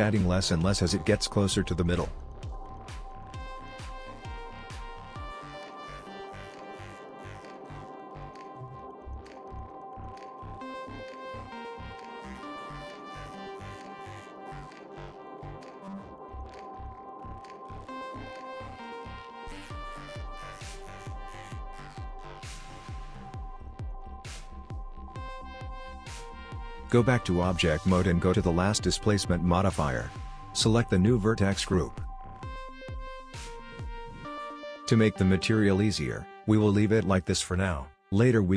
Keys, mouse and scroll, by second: 0.7 f, 2.3 click, 4.4 click, 5.5 click, 6.1 click, 6.8 click, 8.0 f, 8.2 click, 10.2 click, 11.8 click, 12.1 click, 12.4 click, 12.6 click, 12.8 click, 13.0 click, 14.1 click, 15.0-15.3 click, 15.1 click, 15.2 click, 15.2 click, 15.9 click, 16.2 click, 17.0 click, 17.8 click, 18.2 click, 18.3 click, 18.7 click, 19.5-20.0 click, 19.5 click, 19.7 click, 20.2 click, 20.4 click, 20.5-22.3 click, 20.7 click, 20.8 click, 20.9 click, 22.7 middle click, 23.4 click, 23.8 click, 24.1-24.7 click, 24.4 click, 24.4 click, 24.5 click, 24.9 click, 24.9 click, 25.0 click, 25.1 middle click, 26.4 click, 26.5 click, 26.6 click, 26.8 click, 28.5 click, 30.9 click, 33.1 middle click, 36.4 middle click.